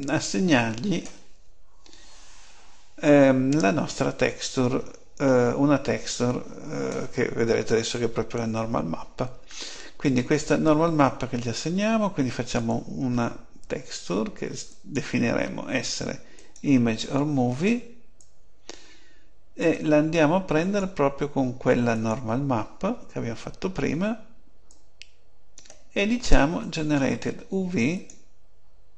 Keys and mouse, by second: 12.5-14.3 drag, 14.6-16.4 drag, 18.1-22.3 drag, 24.6-28.7 drag.